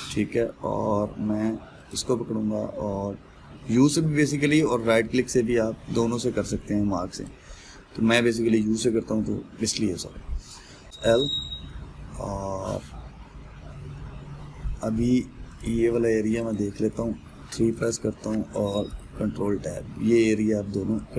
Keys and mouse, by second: 0.1-2.5 middle drag, 2.5 alt+click, 7.9-10.3 right drag, 10.3-11.8 middle drag, 11.8 l, 12.3-16.2 middle drag, 16.2 click, 18.0 3, 18.4 click, 19.5 ctrl+KP_Add.